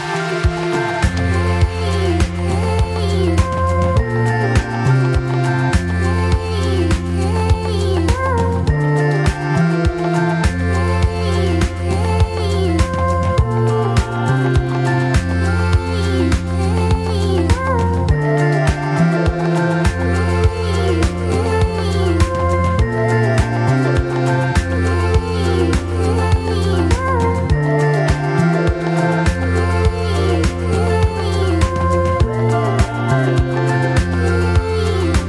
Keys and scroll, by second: 0.7 F4, 2.5 F4, 5.8 F4, 6.2-7.1 typing, 11.4 F4, 12.0 ctrl+s, 13.5 F4, 14.1 F4, 14.7 ctrl+t, 15.2 2, 15.4 F4, 15.6 F3, 16.0 F4, 18.1 ctrl+r, 18.6 F3, 19.7 ctrl+c, 22.4-23.4 typing, 28.1 F3, 29.8 1, 31.9 F3, 33.0 Delete, 33.4 F3, 34.0 2.